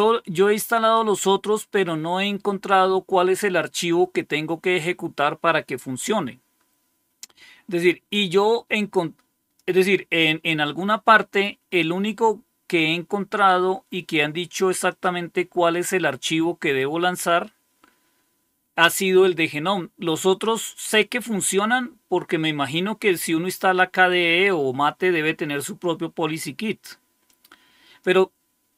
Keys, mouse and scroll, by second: 4.7-9.5 drag, 14.8 click, 27.2 click.